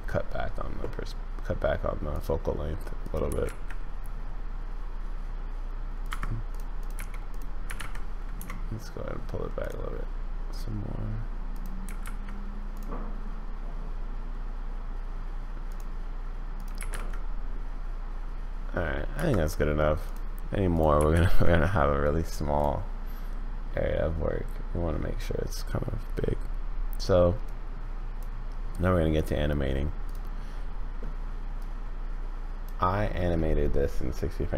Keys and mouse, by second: 2.1 click, 3.0 click, 3.3 g, 6.1 Escape, 6.5 click, 6.8 click, 6.9 g, 7.6 g, 11.5 click, 11.8 g, 16.5 click, 16.8 g, 20.0 click, 20.7 click, 21.0 g, 27.5 click, 31.6 click, 32.4 middle click.